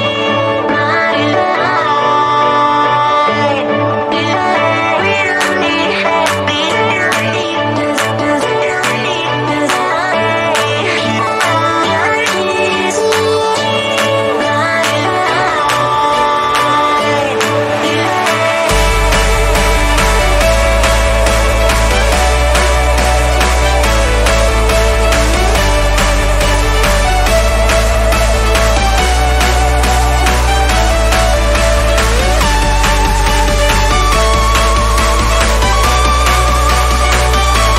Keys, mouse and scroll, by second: 0.2 click, 4.8 click, 5.6 right click, 6.4 click, 11.7-18.3 drag, 18.3-19.4 scroll down 1, 20.1-26.2 drag, 28.1 click, 29.2 ctrl+alt+shift+e, 30.1 click, 31.6 ctrl+z, 31.9 click, 36.7 ctrl+shift+BackSpace, 37.3 ctrl+BackSpace.